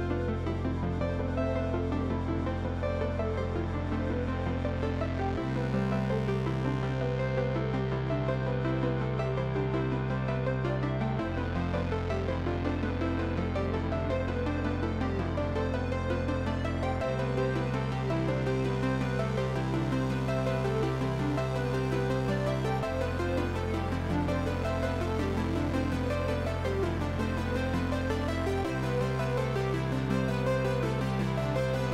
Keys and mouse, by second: 0.4 Delete, 1.5 click, 1.7 Delete, 2.1 click, 2.3 Delete, 2.6 click, 2.9 Delete, 3.5 click, 3.6 Delete, 3.7 click, 3.7 Delete, 3.8 click, 3.9 Delete, 4.1 click, 4.2 Delete, 4.3 click, 4.4 Delete, 4.8 click, 5.0 Delete, 5.2 click, 5.3 Delete, 7.9 click, 8.4 Delete, 9.9 click, 12.4 ctrl+click, 12.6 right click, 12.9 click, 14.9 click, 17.1 ctrl+click, 17.2 right click, 17.7 click, 22.2 right click, 22.5 click, 23.3 b, 23.6 Return, 24.3 click, 24.9 click.